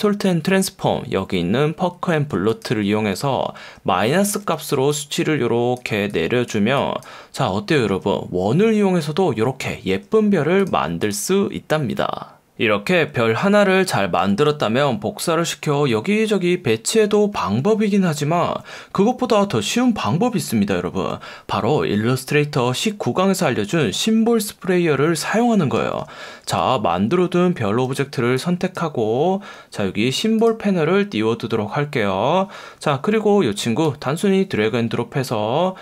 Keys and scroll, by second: 2.6 F1, 3.6 F1, 13.4 F1, 14.5 F1, 26.6 F1, 27.8 F1, 29.6 F1, 32.7 F1.